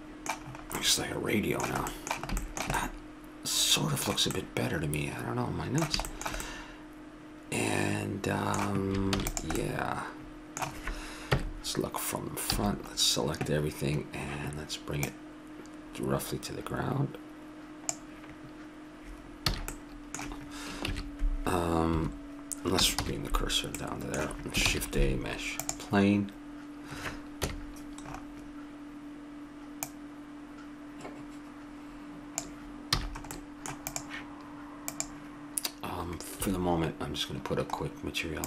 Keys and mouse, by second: 1.0-3.7 middle drag, 4.1 middle click, 4.6 middle click, 7.3 middle click, 9.1 ctrl+s, 9.6 middle click, 11.3 KP_1, 12.5 a, 15.0-16.8 drag, 19.5 a, 19.7-20.9 middle drag, 20.9 shift+a, 23.0 shift+c, 23.8 middle click, 24.6 shift+a, 27.4 KP_1, 29.8-31.9 drag, 33.0 a, 33.1 middle click, 33.9-36.5 drag, 36.5 `.